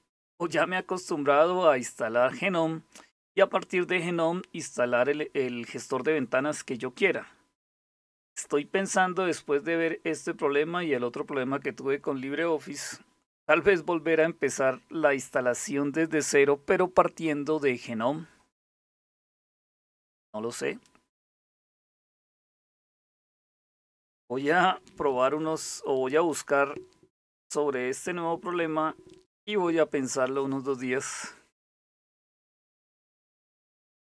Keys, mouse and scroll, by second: 12.4 click, 14.2-15.4 drag.